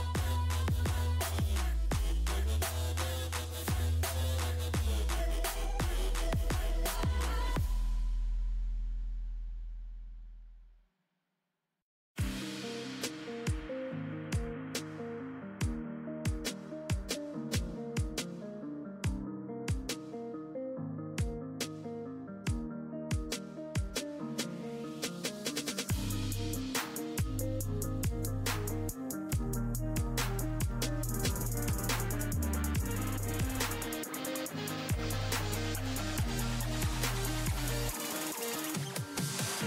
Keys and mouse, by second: 1.6-3.9 drag, 17.0 ctrl+i, 23.3 ctrl+i, 34.8-38.8 right drag, 38.8-39.6 drag.